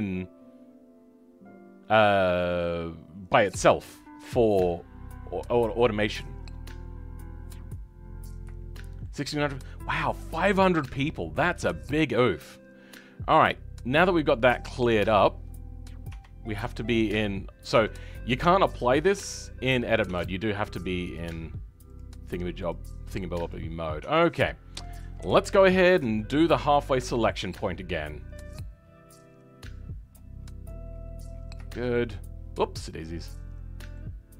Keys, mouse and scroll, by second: 8.7-12.5 shift+middle drag, 12.5-16.0 scroll up 2, 16.0 Tab, 17.7 Tab, 20.0 Tab, 23.4 click, 23.9 Tab, 25.1 KP_7, 26.1 shift+middle click, 26.7-27.0 scroll up 2, 27.0-30.1 shift+middle drag, 30.1 click, 30.3-30.8 scroll up 2, 31.2-31.6 scroll down 3, 31.6-34.3 shift+middle drag.